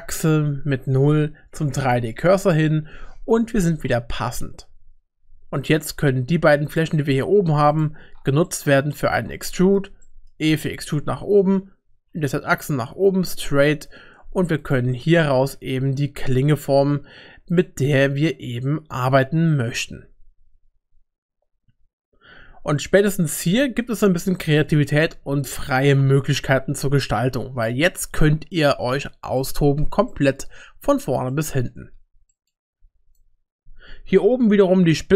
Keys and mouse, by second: 5.2 3, 8.5 middle click, 9.6 shift+middle click, 10.1 middle click, 10.5 e, 14.9 shift+click, 15.6 e, 18.2-19.7 middle drag, 22.8 shift+middle click, 23.3 shift+click, 24.7 ctrl+r, 27.2 ctrl+r, 29.4 middle click, 30.1 shift+middle click, 31.3 shift+middle click, 32.4 middle click, 32.8 1, 33.2-35.1 drag.